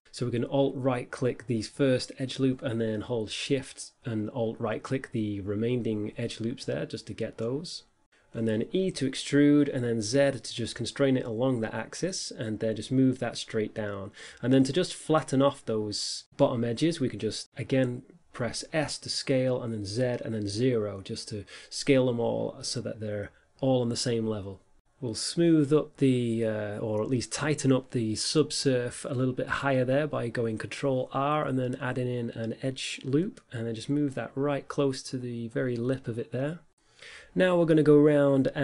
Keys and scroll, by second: 6.9 e, 8.5 z, 17.4 s, 20.1 z, 22.1 0, 24.1 Return.